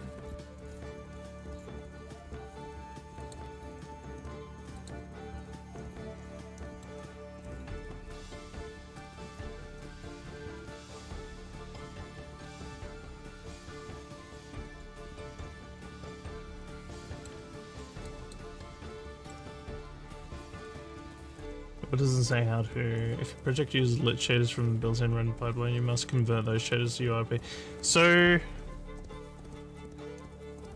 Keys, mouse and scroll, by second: 3.2 click, 4.8 click, 6.6 middle click, 17.0 middle click, 17.0 scroll, 18.1 click, 19.2 middle click.